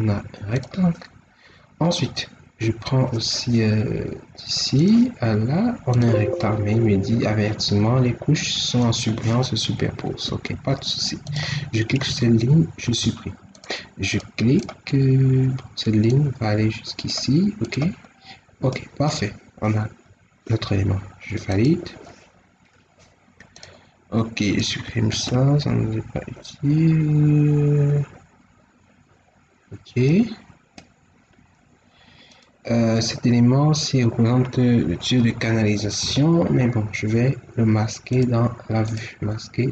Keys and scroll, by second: 10.2 Escape, 12.8 ctrl+x, 25.0 ctrl+x.